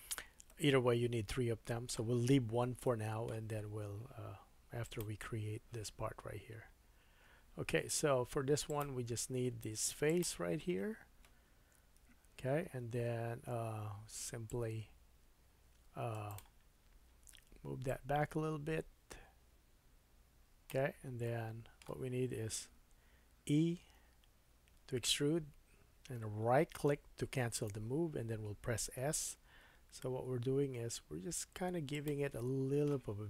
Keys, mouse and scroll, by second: 4.8 click, 5.0-8.6 middle drag, 8.1 Tab, 8.7 click, 9.9 3, 10.1 click, 12.0 KP_1, 12.8-14.5 middle drag, 12.8-14.5 scroll up 3, 14.5-16.3 drag, 16.3-17.8 middle drag, 17.8-24.0 drag, 21.3 middle click, 24.0 e, 29.5 s, 30.9-32.1 drag, 32.1-33.2 middle drag.